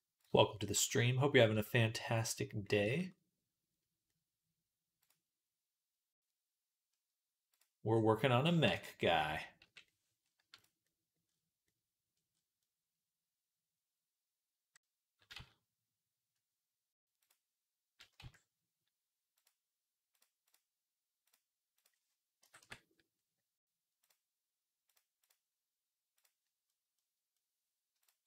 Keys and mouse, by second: 0.0 click, 0.6-4.8 shift+middle drag, 4.8 click, 4.9-11.1 middle drag, 8.5 Tab, 9.5 /, 11.1-12.6 drag, 12.6 click, 13.8 middle click, 14.0-17.1 middle drag, 15.2 z, 17.1 click, 17.2-19.2 middle drag, 18.0 z, 19.2 click, 20.0 middle click, 20.3-28.1 drag, 28.1 middle click.